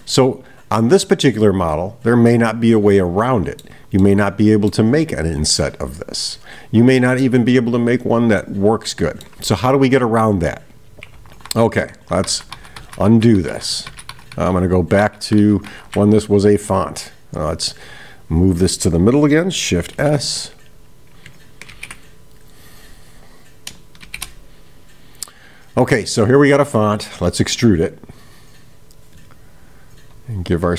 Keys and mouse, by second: 0.0-3.6 middle drag, 4.0-4.8 middle drag, 5.7-7.3 middle drag, 8.4-9.4 middle drag, 17.4-18.3 right drag, 20.8 click, 22.9 click.